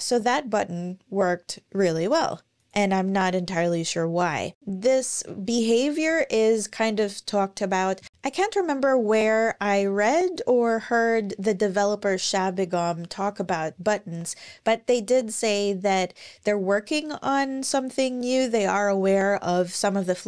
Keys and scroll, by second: 0.5 typing, 13.1 super+,.